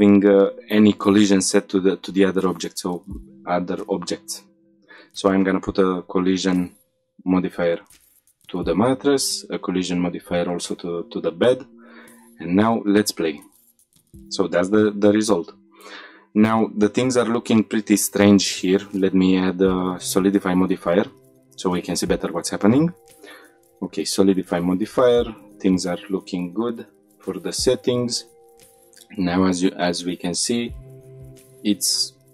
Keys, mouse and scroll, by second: 2.2-3.0 drag, 3.0-4.5 scroll down 3, 4.5-6.0 scroll down 2, 6.8-7.1 scroll up 3, 8.3 click, 9.9 click, 11.1 click, 12.5 click, 14.3-14.8 middle drag, 14.9 shift+middle click, 15.2-16.3 scroll up 2, 20.1 click, 20.6 click, 21.5 click, 28.1 click, 28.4 click, 28.6 shift+middle click, 28.9-30.1 middle drag, 30.1-30.4 shift+middle drag, 30.5-31.1 middle drag, 31.1-31.9 scroll up 2, 31.5-31.9 shift+middle drag.